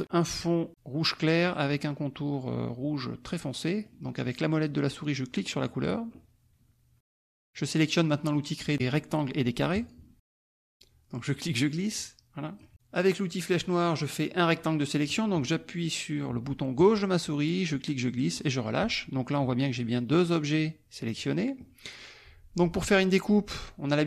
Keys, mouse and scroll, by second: 0.7 click, 3.3 middle click, 5.4 middle click, 10.3 click, 11.2-12.7 drag, 16.7-18.7 drag.